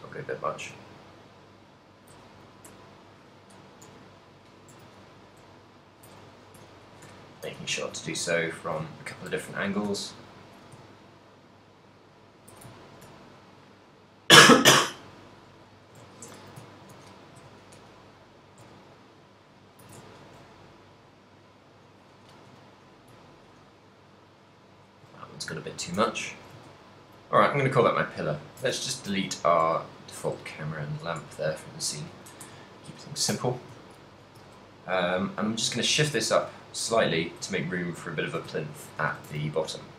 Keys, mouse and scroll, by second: 0.1 a, 0.4 right click, 0.6 r, 2.1 shift+click, 2.2-6.6 typing, 2.5 right click, 3.2 shift+click, 5.2 right click, 6.0 shift+click, 6.4 right click, 7.1 shift+click, 7.6 shift+middle click, 7.6 a, 8.1 r, 8.8 shift+click, 9.0 shift+middle click, 9.6 right click, 9.6 a, 9.8 r, 10.4 shift+click, 10.6 r, 12.5 click, 12.6 a, 13.0 ctrl+middle click, 13.2 shift+middle click, 13.6 middle click, 15.6 shift+middle click, 16.2 ctrl+middle click, 16.4 a, 16.6 ctrl+middle click, 17.1 a, 17.5 KP_3, 18.3 right click, 19.7 shift+click, 20.0 a, 20.3 ctrl+middle click, 20.7 middle click, 22.6 KP_3, 23.3 ctrl+middle click, 24.6 right click, 25.0 r, 25.9 shift+click, 26.1 a, 26.3 shift+middle click, 26.7 ctrl+middle click, 27.7 right click, 28.3 ctrl+middle click, 28.9 ctrl+middle click, 29.6 shift+right click, 30.1 x, 31.7 shift+middle click, 32.5 KP_1, 33.4 a, 33.4 s, 33.9 shift+middle click, 34.4 g, 36.3 click, 37.1 f, 37.1 z, 37.1 g, 38.3 shift+click, 38.7 shift+middle click, 39.1 a.